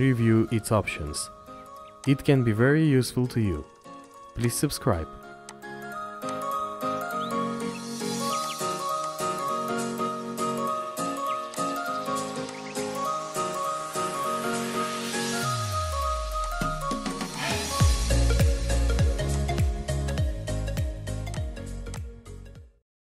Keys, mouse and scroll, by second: 0.2 scroll up 1.